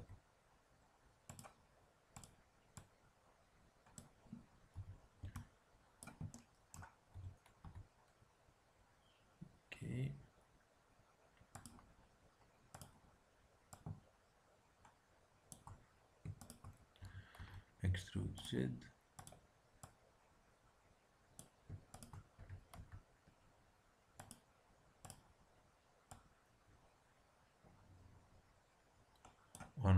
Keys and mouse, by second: 2.1-3.9 drag, 4.7 a, 5.2 b, 6.3-8.0 drag, 7.1 e, 12.7-15.4 drag, 16.3-18.2 drag, 16.9 e, 19.1-21.6 drag, 21.9-23.6 drag, 22.3 e, 25.0-27.8 drag.